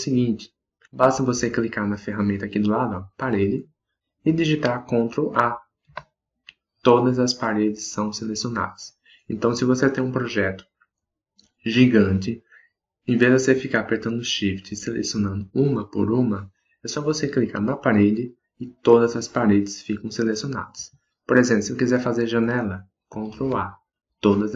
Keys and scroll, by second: 5.8 ctrl+a.